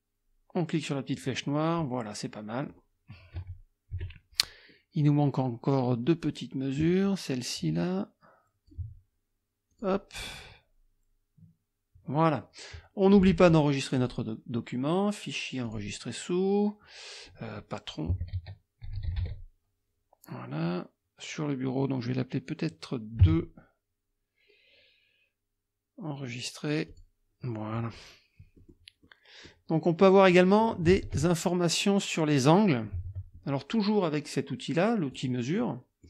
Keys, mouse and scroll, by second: 2.2 click, 3.4 KP_Subtract, 4.7 click, 6.8-8.9 drag, 9.8 click, 13.0 click, 14.0 click, 15.6 click, 17.9-19.7 typing, 23.2 KP_2, 26.9 click, 28.6 click, 29.0 click, 31.1 alt+Tab, 33.0 alt+Tab, 35.1 click, 35.6-35.9 scroll up 4, 35.6 middle click.